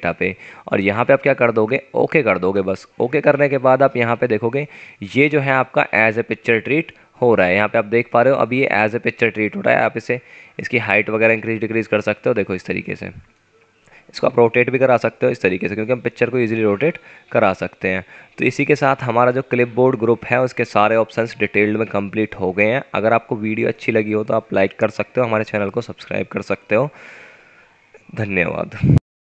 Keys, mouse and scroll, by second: 7.8 F9.